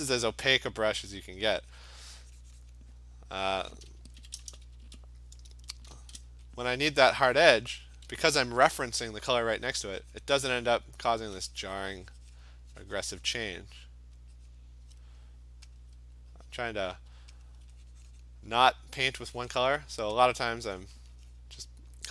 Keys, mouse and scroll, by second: 1.2 alt+click, 2.1 click, 2.2 click, 2.2 alt+click, 2.7 click, 3.5 alt+click, 4.2-4.8 typing, 5.9 shift+1, 6.2 !, 6.7 click, 8.0 click, 9.2 alt+click, 10.2 click, 10.7 click, 11.0 alt+click, 11.2 alt+click, 12.4 click, 13.2 click, 14.6 click, 15.8 alt+click, 16.9 click, 17.5 alt+click, 18.2 click, 18.8 alt+click, 19.4 click, 19.7 click, 19.7 alt+click, 20.3 alt+click, 20.6 click, 21.1 click, 21.4 click, 22.0 alt+click, 22.0 alt+click.